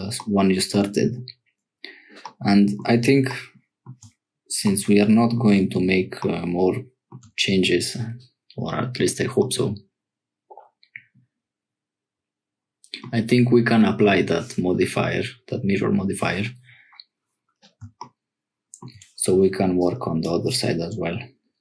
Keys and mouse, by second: 2.2 click, 3.6 shift+middle click, 4.6 middle click, 9.4-13.1 middle drag, 19.8 click.